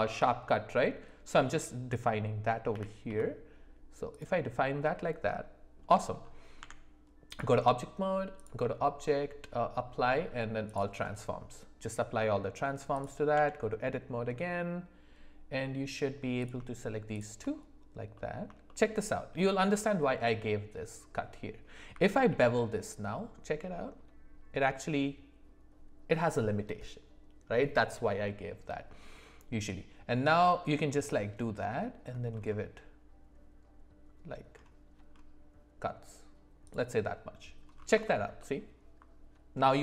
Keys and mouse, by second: 2.7 g, 4.8 middle click, 6.6 Tab, 8.4-10.7 drag, 12.2 middle click, 13.3 Tab, 16.4 click, 18.1 middle click, 18.6 shift+middle click, 22.3 ctrl+b, 38.0 alt+middle click, 38.4 alt+middle click.